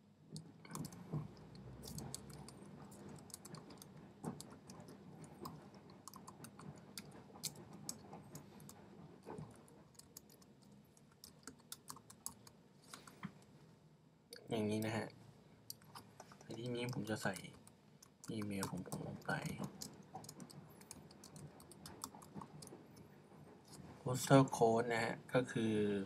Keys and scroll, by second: 0.0-8.1 typing, 9.3-12.3 typing, 16.9-22.4 typing.